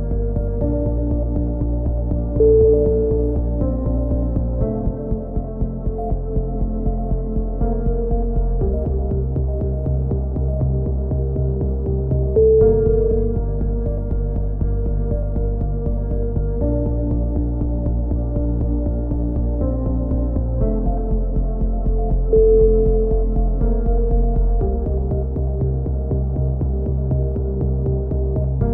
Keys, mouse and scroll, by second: 0.2 z, 0.4 a, 1.5-2.5 drag, 2.5 middle click, 4.2 ctrl+KP_7, 5.2 ctrl+r, 7.6 click, 7.8 a, 8.1 k, 10.5 a, 11.5 b, 12.9 g, 13.6 ctrl+z, 14.3 g, 18.5 ctrl+z, 19.1-20.8 drag, 20.8 ctrl+KP_7, 21.8 g, 24.0 s, 25.3-27.4 drag, 27.4 middle click, 27.7 z.